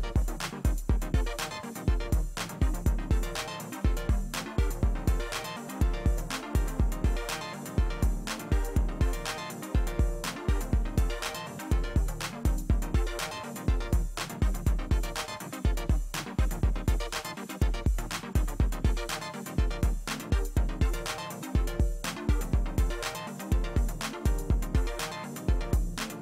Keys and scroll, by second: 1.3 space.